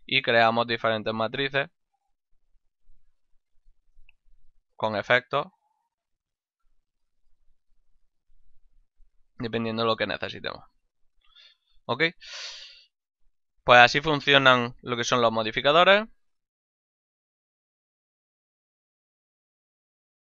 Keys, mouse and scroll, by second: 0.1 ctrl+middle click, 2.9 click, 4.3 click, 6.6 click, 8.7 middle click, 9.5 shift+middle click, 11.2 ctrl+middle click, 12.0 middle click, 12.4 middle click, 13.3 middle click, 13.7 middle click, 14.5 middle click.